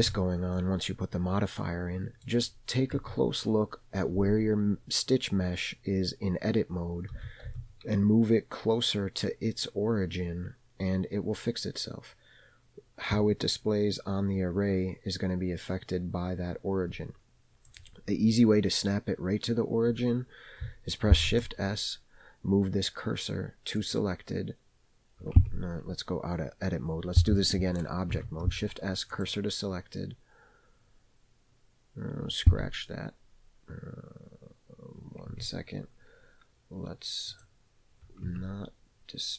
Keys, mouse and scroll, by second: 0.0 Tab, 0.6-2.3 middle drag, 3.0 Tab, 3.7-4.2 scroll up 1, 7.2 g, 21.1 shift+s, 25.4 Tab, 28.1 shift+s, 32.6 Tab, 35.3 Tab, 37.3 click, 38.3 Tab.